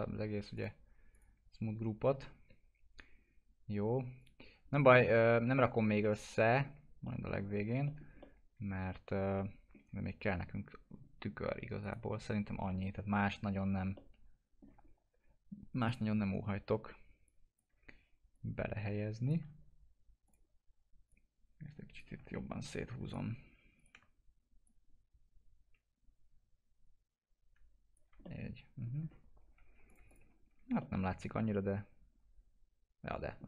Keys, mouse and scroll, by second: 0.5 click, 4.1 click, 4.7 alt+middle click, 6.0-7.8 alt+middle drag, 8.2-13.9 alt+middle drag, 11.8 right click, 14.2 alt+middle click, 14.8 scroll up 1, 15.8 click, 18.3 ctrl+click, 22.3 ctrl+z, 23.0-28.2 ctrl+drag, 28.2 alt+middle click, 28.9-29.8 scroll down 1, 29.8 click, 30.2 F4, 30.7-33.4 alt+middle drag.